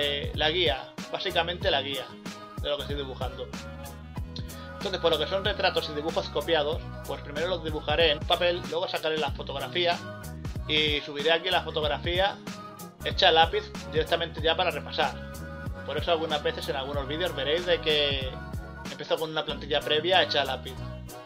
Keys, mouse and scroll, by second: 7.0 scroll up 1, 7.2 scroll down 2, 9.7 scroll up 1, 9.8 ctrl+z, 11.2 scroll up 1, 13.2 scroll up 1, 13.7 scroll down 1, 14.4 scroll up 1, 14.5 scroll down 1, 14.7 ctrl+z, 18.7 scroll up 1, 19.0 scroll down 1, 19.9 scroll up 1, 20.2 scroll down 1, 20.7 scroll down 1.